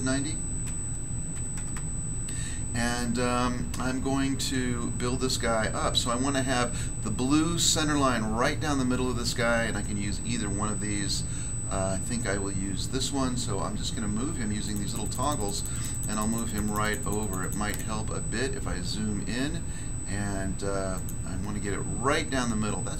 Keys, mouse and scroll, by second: 0.6-1.5 typing, 1.7 Return, 14.6 click, 14.8 click, 15.0 click, 15.1 click, 15.2 click, 15.4 click, 15.4 click, 15.5 double click, 15.7 double click, 15.8 double click, 15.9 double click, 16.1 double click, 16.2 double click, 16.3 double click, 16.5 double click, 16.6 double click, 16.8 double click, 16.9 double click, 17.0 double click, 17.2 double click, 17.3 double click, 17.4 double click, 17.6 double click, 17.7 double click, 18.2 scroll up 1, 18.9 scroll down 1, 20.9 click.